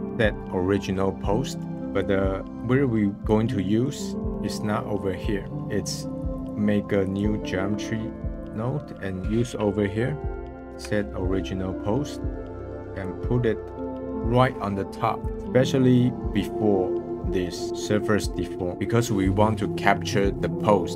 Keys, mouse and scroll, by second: 0.1 click, 1.3 scroll down 3, 1.6 middle click, 2.0-3.6 drag, 3.6-5.6 middle drag, 6.3-10.3 drag, 13.0-15.3 drag.